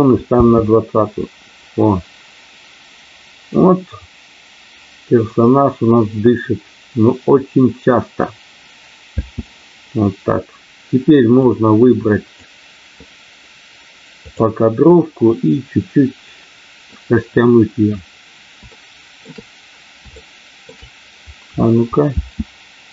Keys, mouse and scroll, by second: 0.4 space, 9.0 space, 11.4 click, 14.3 click, 18.9 shift+middle click, 20.1 shift+middle click, 22.0 space.